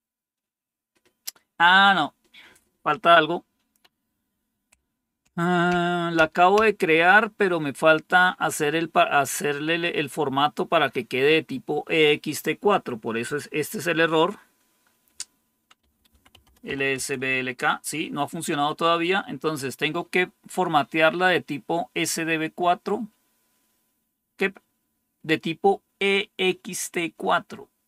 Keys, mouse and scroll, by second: 15.5-17.1 typing.